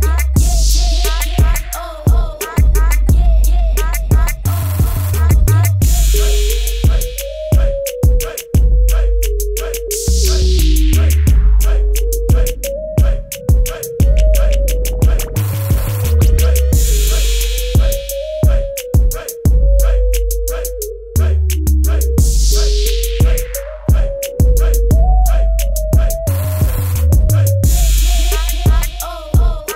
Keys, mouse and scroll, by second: 1.1 right click, 2.3 click, 4.2 t, 4.7 alt+shift+click, 5.8 click, 6.8 KP_Enter, 13.4 ctrl+z, 13.8 click, 19.8 right click, 22.2 click, 24.4 ctrl+t, 25.4 click.